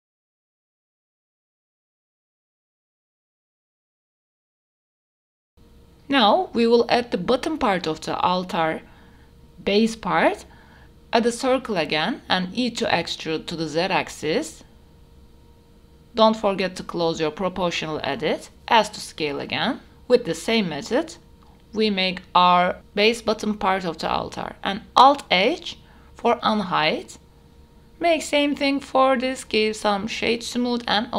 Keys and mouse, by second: 0.1 click, 0.3 g, 0.4 x, 0.6 click, 0.8 middle click, 0.9 click, 1.0 click, 1.3 click, 1.5 g, 1.6 y, 1.9 click, 1.9 g, 2.0 x, 2.1 Tab, 2.3 click, 2.7 click, 2.7 right click, 2.7 Tab, 3.3 click, 3.5 click, 3.5 right click, 3.7-5.8 typing, 4.2 click, 4.4 Tab, 4.5 click, 5.4 drag, 7.7 s, 11.2 Tab, 12.0 e, 12.4 z, 13.7 click, 14.2 e, 14.5 click, 15.0 s, 17.4 click, 17.9 s, 24.6 click, 24.9 e, 25.2 z, 25.5 click, 25.9 f, 26.1 Tab, 27.1 alt+h, 27.7 click, 28.3 click, 30.9 click.